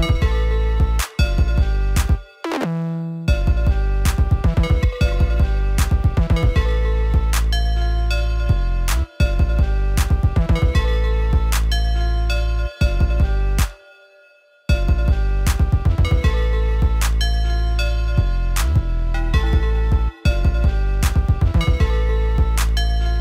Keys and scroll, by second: 12.4 ctrl+Down, 14.4 ctrl+Down, 14.6 ctrl+space.